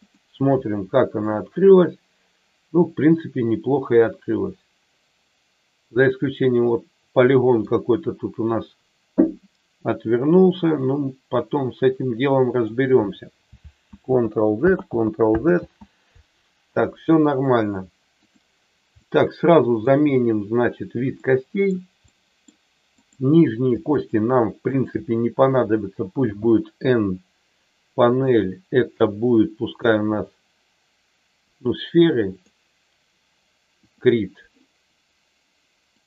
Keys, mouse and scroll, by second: 1.2 click, 1.7-7.7 middle drag, 10.8-12.6 middle drag, 13.8 ctrl+z, 14.7 ctrl+z, 15.4 ctrl+z, 18.2 click, 18.9 middle click, 21.2 middle click, 22.1 middle click, 23.1 click, 24.1 shift+click, 24.7 shift+click, 26.2 n, 28.7 click, 29.8-32.5 drag, 33.8 click, 35.9 click.